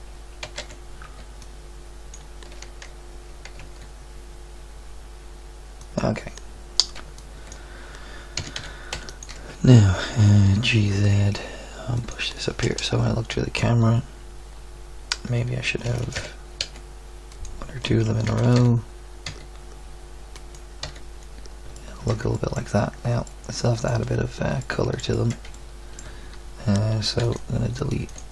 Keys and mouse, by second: 0.4 z, 0.6 a, 1.0 b, 3.5 g, 7.0 b, 8.4 s, 9.5 Tab, 10.5 g, 12.6 KP_0, 15.9 shift+d, 16.1 g, 18.3 shift+d, 18.5 g, 20.8 z, 24.2-24.8 middle drag, 27.2 x, 28.0 x.